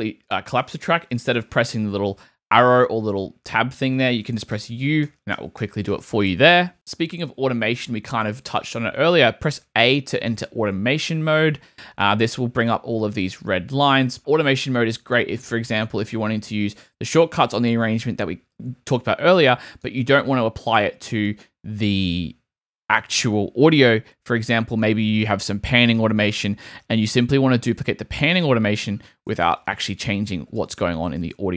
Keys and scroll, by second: 4.5 u, 9.6 a, 28.5 super+d, 29.7 super+z.